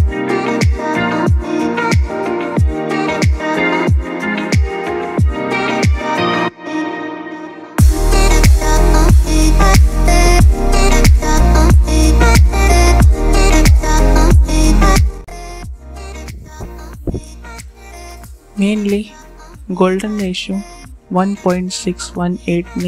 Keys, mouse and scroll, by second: 0.4 shift+F12, 1.9 right click, 2.5 click, 6.3-7.6 alt+shift+drag, 8.3 shift+x, 9.1 click, 13.8 click, 18.0 click, 20.3 click.